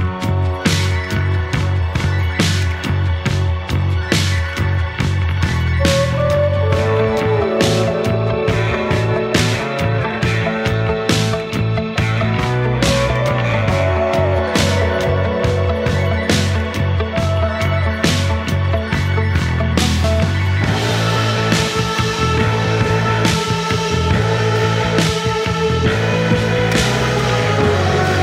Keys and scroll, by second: 3.8 2, 4.3 F1, 4.5 F2, 6.8 ], 7.1 Delete, 7.6 ], 10.5 4, 18.7 3, 20.7 F1.